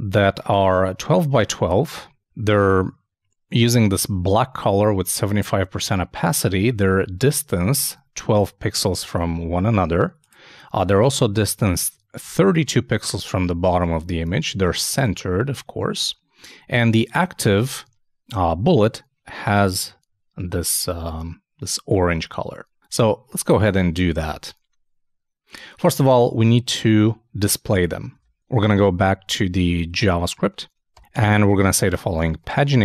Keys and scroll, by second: 28.1 super+Tab.